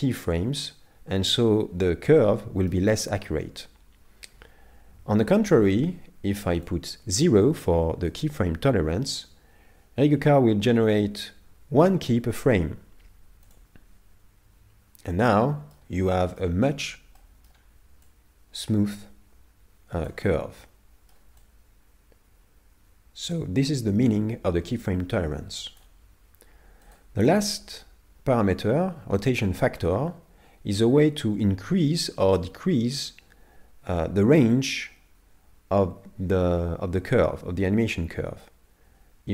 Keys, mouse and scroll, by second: 0.1 middle click, 5.3 click, 14.9-15.3 scroll down 2, 15.3 middle click, 16.7-17.4 scroll up 5, 17.2 middle click, 18.1 click, 20.4 scroll down 5, 20.6 middle click, 21.5 click, 26.9 click.